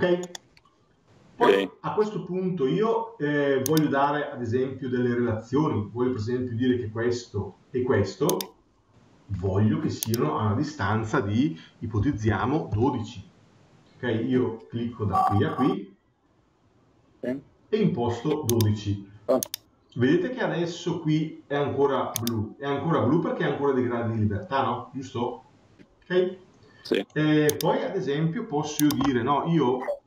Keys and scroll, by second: 12.6 Return.